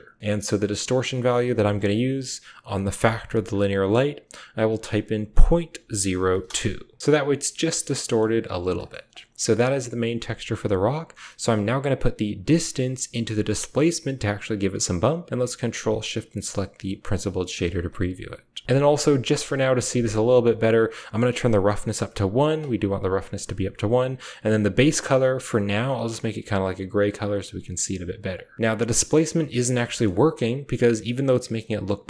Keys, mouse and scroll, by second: 1.2 click, 4.9-6.2 drag, 7.6 shift+middle click, 8.7 click, 9.4 a, 11.0 click, 12.5-13.8 drag, 14.6 typing, 16.3 ctrl+shift+click, 16.4-17.8 typing, 17.1 click, 21.5 click, 24.2 click, 29.7 shift+middle drag, 29.8-31.1 typing, 30.4 drag.